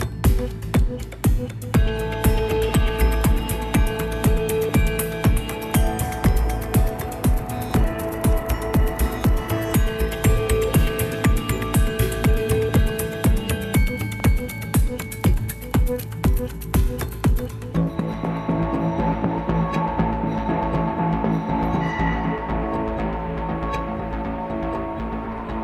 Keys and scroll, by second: 1.5 ctrl+alt+shift+b, 19.6 ctrl+c, 19.9 ctrl+v, 23.9 ctrl++, 24.0 ctrl++.